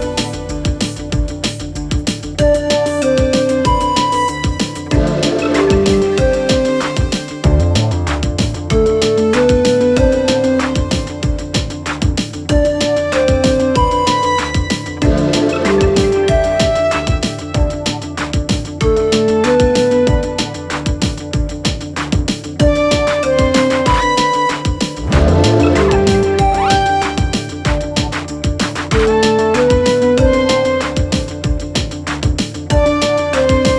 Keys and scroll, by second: 1.3 3, 1.8 ], 2.8 4, 7.5 4, 17.2 2, 21.3 ctrl+z, 24.6 4, 27.6 3, 29.6 ], 30.8 4.